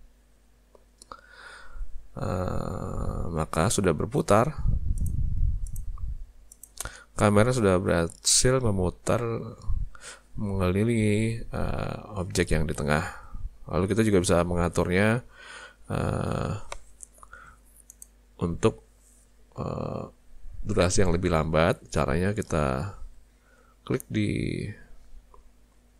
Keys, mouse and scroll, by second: 5.0 click, 5.7 click, 6.5 click, 13.1 space, 17.9 click.